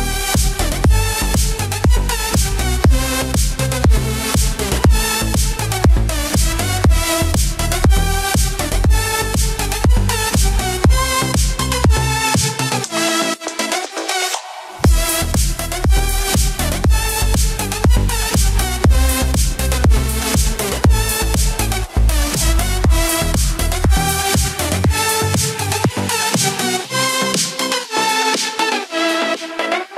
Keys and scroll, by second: 3.1 ctrl+z, 6.8 ctrl+=, 12.4 ctrl+=, 19.1 ctrl+-, 19.3 ctrl+0, 19.7 ctrl+=, 24.8 ctrl+=.